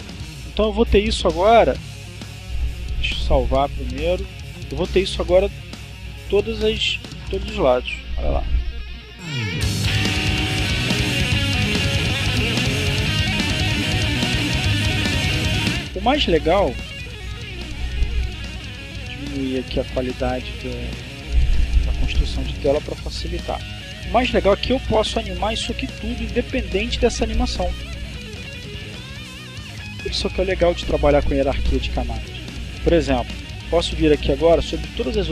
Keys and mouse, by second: 2.1 click, 3.3 click, 4.9 click, 5.9 click, 14.8 click, 16.8 click, 17.7 click, 19.1 click, 21.3 click, 32.9 click.